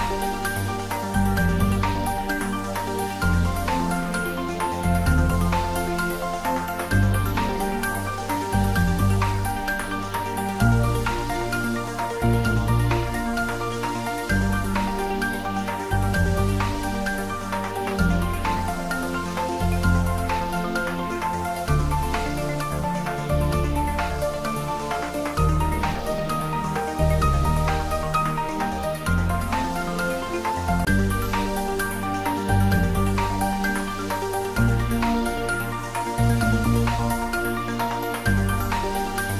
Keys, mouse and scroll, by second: 1.0 click, 2.1 shift+click, 3.6 g, 6.2 click, 6.9 shift+x, 8.4 shift+z, 9.1 scroll down 1, 9.6-11.3 middle drag, 11.3 click, 14.1 shift+click, 15.3 x, 15.5 click, 16.3 scroll down 1, 17.0-20.5 middle drag, 29.0-31.2 drag, 31.2 shift+a, 33.6 click, 35.3 x, 35.5 click, 38.0 click, 39.0 scroll up 1.